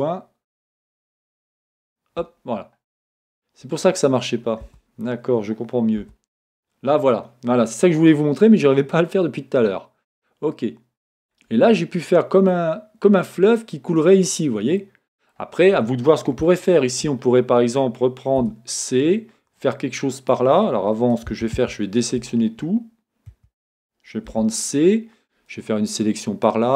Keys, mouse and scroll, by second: 11.3-26.7 middle drag, 18.4 c, 22.6 Escape, 23.3 a, 24.3 c.